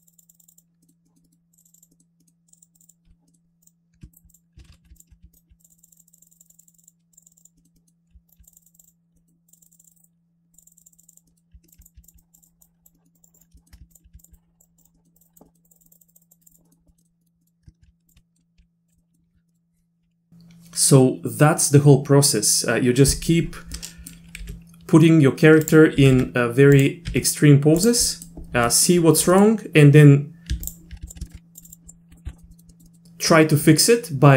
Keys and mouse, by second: 0.0 click, 0.1 click, 0.3 click, 0.4 click, 0.8 middle click, 1.1 middle click, 1.2 middle click, 1.5 click, 1.7 click, 1.8 click, 1.9 middle click, 2.2 middle click, 2.5 click, 2.6 click, 2.8 click, 2.8 click, 3.1 z, 3.3 click, 3.6 click, 4.1 ctrl+click, 4.3 click, 4.6 ctrl+z, 4.7 ctrl+z, 5.0 ctrl+click, 5.3 ctrl+click, 5.6 click, 5.7 click, 5.8 click, 5.9 click, 6.0 click, 6.1 click, 6.3 click, 6.4 click, 6.5 click, 6.5 click, 6.6 click, 6.7 click, 6.8 click, 7.1 click, 7.2 click, 7.3 click, 7.4 click, 7.6 middle click, 7.8 middle click, 8.3 ctrl+click, 8.4 click, 8.6 click, 8.7 click, 8.8 click, 9.2 middle click, 9.5 click, 9.6 click, 9.7 click, 9.7 click, 9.8 click, 10.0 click, 10.5 click, 10.6 click, 10.7 click, 10.8 click, 10.9 click, 11.0 click, 11.3 middle click, 11.8 click, 12.0 ctrl+click, 12.2 click, 12.4 click, 12.6 click, 12.9 middle click, 13.2 click, 13.3 click, 13.6 shift+click, 14.2 ctrl+click, 14.3 click, 14.6 click, 14.9 middle click, 15.2 click, 15.2 click, 15.5 middle click, 15.7 click, 15.8 click, 15.9 click, 16.1 click, 16.2 click, 16.4 click, 16.5 click, 16.7 click, 16.9 middle click, 17.2 middle click, 17.4 middle click, 18.1 ctrl+click, 18.2 middle click, 18.6 g, 19.0 middle click, 19.5 middle click, 23.8 middle click, 24.4 g, 26.1 r, 27.2 r, 28.1 middle click, 28.7 middle click, 29.3 middle click, 30.7 ctrl+click, 31.1 ctrl+click, 31.2 shift+click, 31.5 click, 31.7 click, 31.9 click, 32.1 middle click, 32.2 z, 32.3 middle click, 32.5 middle click, 32.7 middle click, 32.8 middle click.